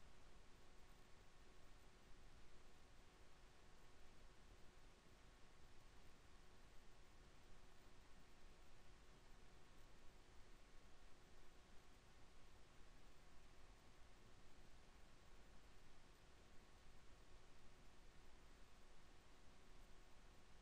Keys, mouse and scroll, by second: 3.6 ctrl+z, 4.8 KP_1, 5.4 e, 11.7 KP_7, 12.2 e, 15.2 click, 15.9 KP_1, 16.4 e.